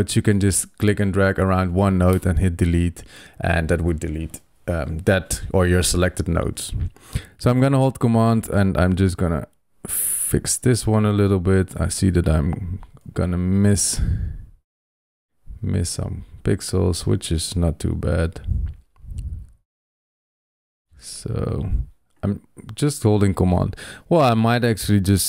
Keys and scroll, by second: 2.0 super+BackSpace, 12.9 super+z.